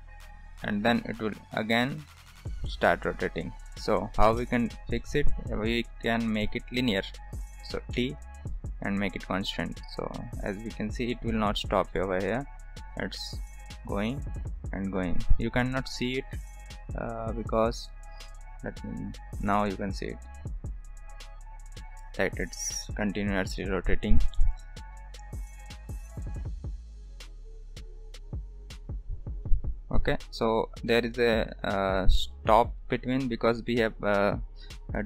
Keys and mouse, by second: 4.3 space, 4.9 middle click, 5.8-7.1 drag, 7.9 t, 10.0 click, 11.7 space, 15.4 drag, 15.8 space, 16.2 space, 17.9-19.2 drag, 30.2 space, 31.0-32.6 drag.